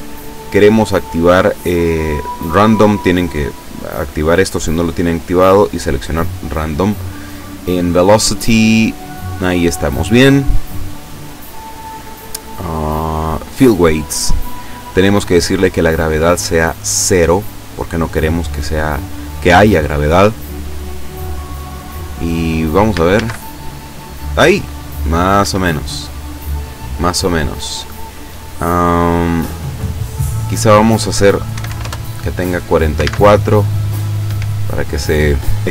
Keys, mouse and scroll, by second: 5.7 click, 7.0-7.4 scroll down 1, 10.4-11.0 scroll down 2, 11.4-12.2 scroll down 4, 14.0 click, 14.4-14.9 scroll down 1, 16.3-17.6 drag, 18.0-18.5 scroll up 3, 20.1-22.2 scroll up 6, 23.2 alt+a, 25.5 Escape, 30.5 click, 31.5 KP_4, 31.8 Return, 34.3 Escape.